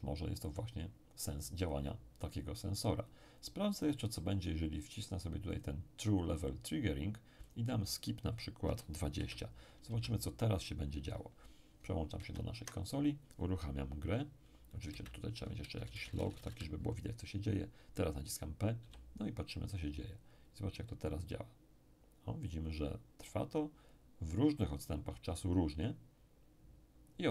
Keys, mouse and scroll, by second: 1.6 click, 5.5 click, 7.4 click, 8.6 2, 9.1 0, 9.8 Return, 12.1 alt+Tab, 14.9 space, 15.7 Return, 15.9 Return, 16.1 Return, 18.8 p.